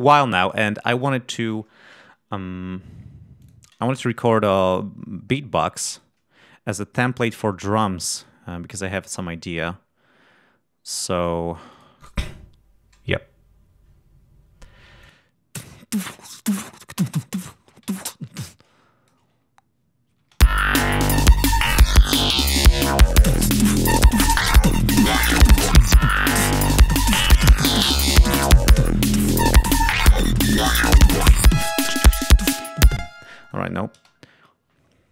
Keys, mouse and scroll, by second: 0.5 ctrl+scroll down 2, 1.0 ctrl+scroll up 2, 3.3 click, 4.0 ctrl+scroll up 2, 4.8-5.1 scroll down 2, 5.8 right click, 6.3 click, 8.1-9.7 drag, 10.8 click, 11.6 click, 14.9 click, 17.7 7, 18.1-19.1 drag, 20.1 shift+space, 27.3 ctrl+scroll down 2, 32.9 space, 33.3 click, 33.9 shift+space.